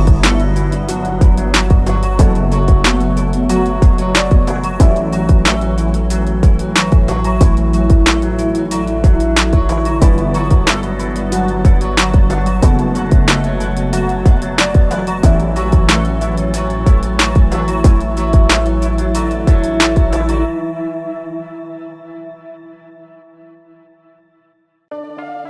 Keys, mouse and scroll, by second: 1.4 click, 2.7 scroll up 1, 4.8 click, 5.4-6.3 alt+scroll up 2, 7.3 alt+shift+click, 9.3 click, 12.6 shift+click, 14.5 shift+click, 15.2-15.9 alt+scroll down 2, 16.6 click, 20.6 scroll up 1, 21.7 click, 25.0 click.